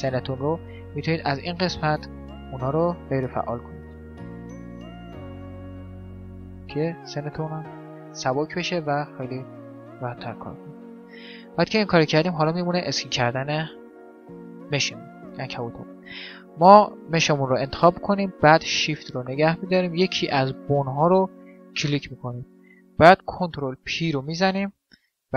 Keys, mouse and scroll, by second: 1.4-7.8 drag, 7.8 click, 8.1-14.2 middle drag, 13.2 click, 13.8 right click, 15.0-16.3 middle drag, 16.3-18.0 right drag, 20.5 right click, 23.5 ctrl+p.